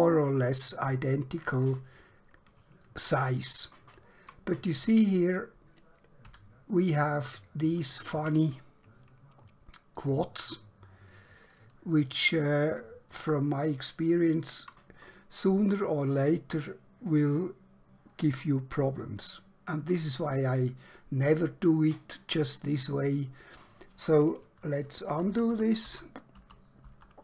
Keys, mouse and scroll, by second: 1.6 scroll down 1, 2.1 scroll up 1, 2.9 shift+middle click, 6.3 3, 7.4 click, 10.1 shift+click, 12.1 shift+click, 14.1 click, 24.5 ctrl+Num_Lock, 25.1 ctrl+z, 25.4 ctrl+z, 25.6 ctrl+z, 25.9 ctrl+z, 26.4 ctrl+z, 26.9 ctrl+z.